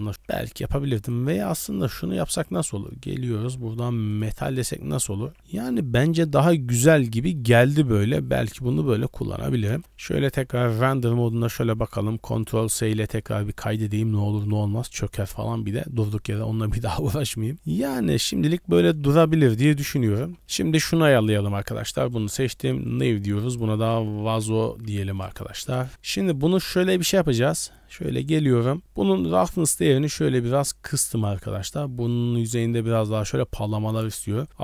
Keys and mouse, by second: 0.5 Tab, 2.3 click, 4.6 middle drag, 5.0 a, 5.2 a, 5.4-6.4 middle drag, 7.4 shift+middle click, 7.6 middle drag, 8.6 middle drag, 9.7 KP_0, 10.1 z, 12.6 ctrl+s, 17.6 z, 19.1 shift+middle drag, 19.4 middle drag, 20.1 z, 20.4 alt+a, 20.4 middle click, 21.1 click, 22.9 click, 23.5-25.7 drag, 26.3 click, 29.5-31.2 drag.